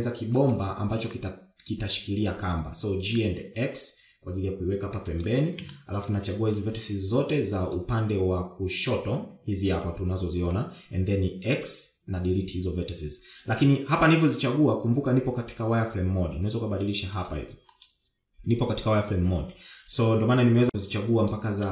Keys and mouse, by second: 0.1 shift+z, 0.5 s, 2.1 g, 6.8 shift+middle click, 7.7-8.8 drag, 12.6 x, 18.3 click, 18.8 click, 21.6 click.